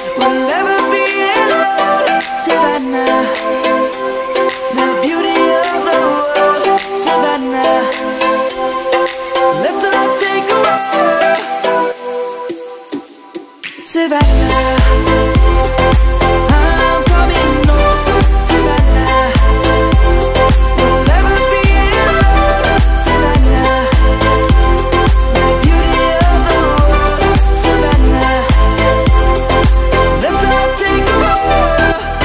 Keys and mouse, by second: 1.5 r, 3.8 right click, 4.7 r, 6.3 right click, 7.0 t, 10.5 Return, 11.4 s, 12.9 click, 14.3 shift+middle click, 15.5 middle click, 16.8 s, 20.4 middle click, 22.6 ctrl+1, 24.1 click, 29.3 click.